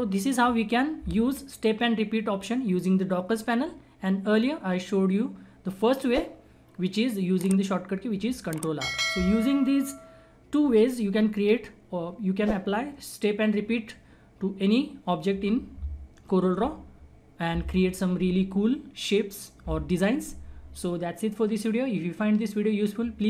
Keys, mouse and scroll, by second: 0.6-2.4 scroll up 1, 3.7 scroll down 1.